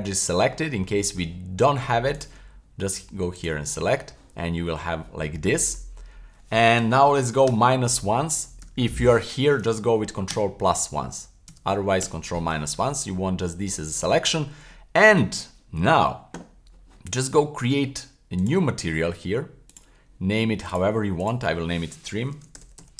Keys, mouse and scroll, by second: 0.6 middle click, 2.1 click, 3.3 click, 6.0-6.5 scroll up 1, 7.5 super+KP_Subtract, 8.6 super+KP_Subtract, 10.3 super+KP_Add, 11.5 super+KP_Add, 12.0 super+KP_Subtract, 13.6 middle click, 14.3 scroll down 1, 14.7 middle click, 18.4 click, 19.7 click, 20.7 click, 21.2-22.9 drag.